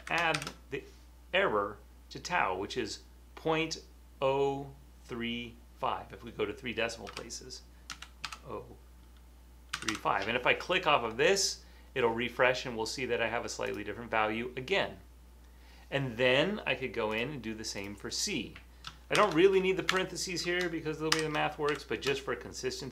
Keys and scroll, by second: 0.0-0.3 typing, 7.2-10.4 typing, 19.3-19.9 typing, 21.1-21.7 typing.